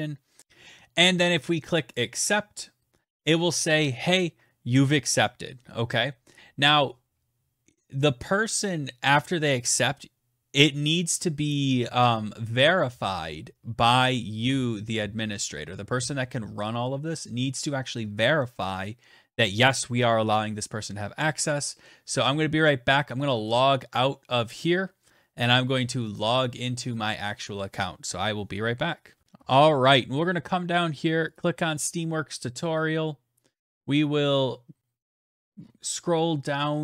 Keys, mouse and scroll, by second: 0.4 ctrl+v, 0.4 click, 1.4 click, 22.9 click, 24.0 click, 25.5 click, 26.3 click, 29.2-29.7 scroll down 10, 30.6 click, 30.6-32.2 scroll down 1, 32.5-33.0 scroll, 34.7-36.0 scroll.